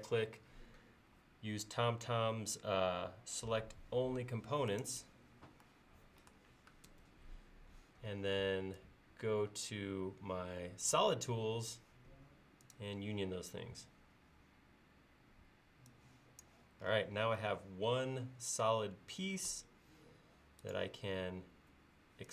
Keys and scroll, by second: 6.9 ctrl+s.